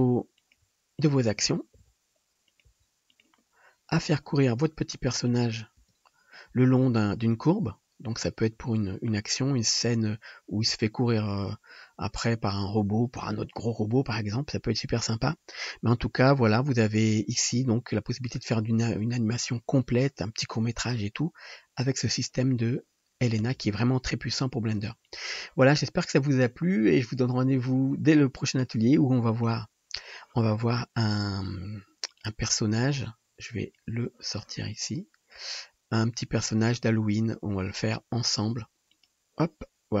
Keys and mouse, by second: 0.5 shift+d, 0.5 r, 1.8 shift+d, 2.7 r, 5.3 middle click, 5.3 right click, 15.5-40.0 drag, 23.6 space.